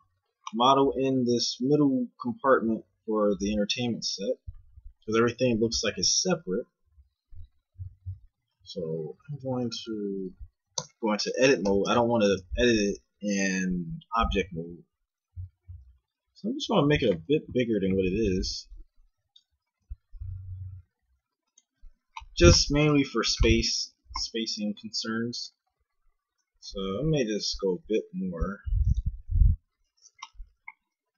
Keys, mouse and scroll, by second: 9.1 s, 10.7 Tab, 11.7 s, 18.0 a, 18.3 c, 19.7 g, 23.0 z, 24.5 KP_1, 25.7 z, 26.6 g, 29.2 a, 29.4 z.